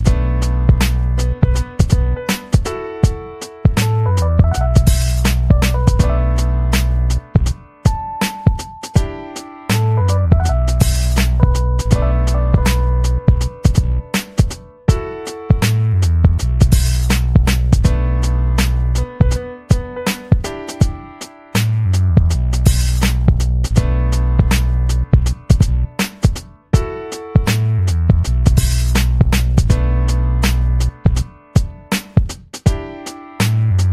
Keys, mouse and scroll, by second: 1.2-3.8 drag, 4.9-6.4 drag, 6.9-10.7 drag, 10.9 click, 12.3 ctrl+scroll down 2, 14.0 middle click, 14.0 scroll, 15.4 middle click, 15.4 scroll, 16.2 middle click, 16.2 scroll, 18.4 click, 19.3 click, 20.3 Escape, 21.0 click, 21.4-25.6 typing, 25.9 ctrl+scroll up 2, 26.6 F1, 27.4 click, 27.8 click, 28.3 p, 28.8 BackSpace, 29.2 alt+shift+p, 29.3 alt+shift+v, 30.3 click, 31.0-32.4 drag, 32.7 click, 32.9 click.